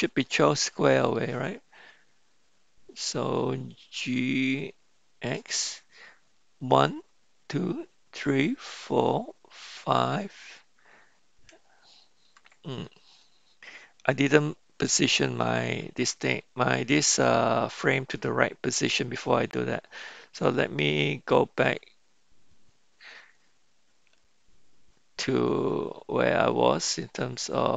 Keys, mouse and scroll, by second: 0.3-1.1 right drag, 4.4 g, 15.1-19.0 drag.